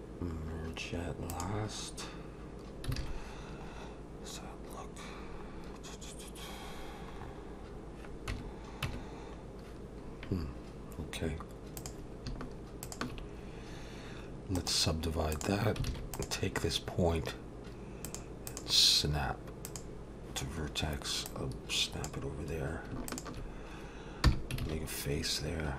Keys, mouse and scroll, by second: 3.0 alt+a, 3.3-4.1 scroll down 2, 5.3-6.1 scroll down 4, 6.7-7.2 scroll down 2, 7.2-7.8 scroll up 7, 8.3 Tab, 8.8 Tab, 11.8 click, 12.8 shift+click, 14.6 right click, 15.9 alt+a, 16.1 click, 18.1 click, 21.3 click, 23.1 shift+click, 24.3 f, 24.6 alt+a.